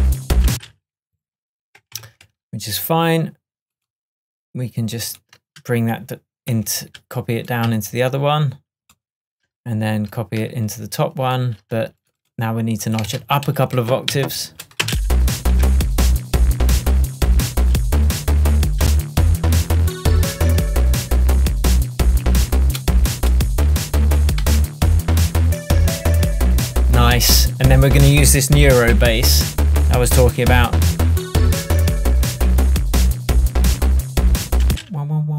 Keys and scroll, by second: 0.5 space, 13.2 super+a, 15.7 shift+Tab, 30.6 super+z, 34.7 space.